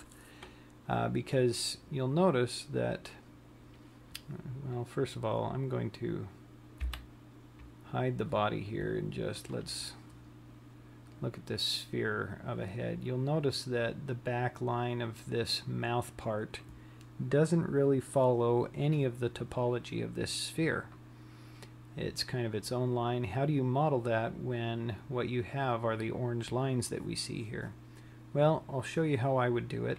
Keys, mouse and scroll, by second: 7.8 h, 10.1 click, 11.3-12.3 scroll up 4, 12.3-12.9 scroll down 1.